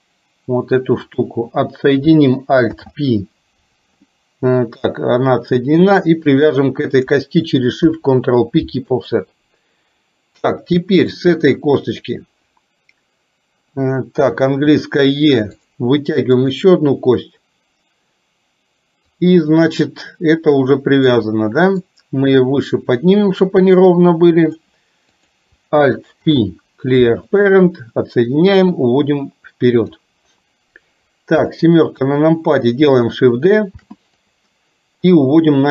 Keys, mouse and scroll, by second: 2.7 alt+p, 6.4 shift+click, 7.9 ctrl+p, 11.2 click, 14.7 e, 16.4 click, 19.2-21.1 drag, 22.0-24.7 drag, 25.2 click, 26.2 alt+p, 28.4-30.0 drag, 31.5 KP_7, 33.9 shift+d, 35.1-35.7 drag.